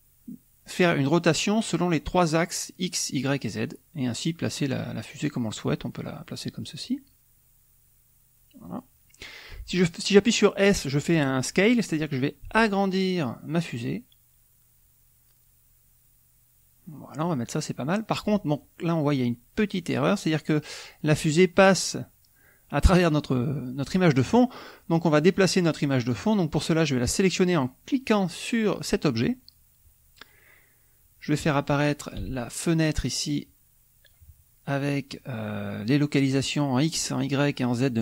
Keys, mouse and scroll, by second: 8.6 click, 12.5 s, 17.1 click, 28.6 click, 32.1 n, 33.2-34.3 drag.